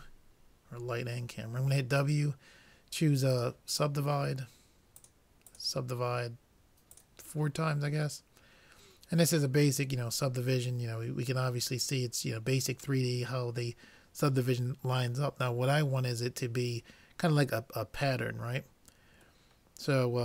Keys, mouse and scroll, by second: 5.1-8.6 drag, 19.5-20.2 middle drag.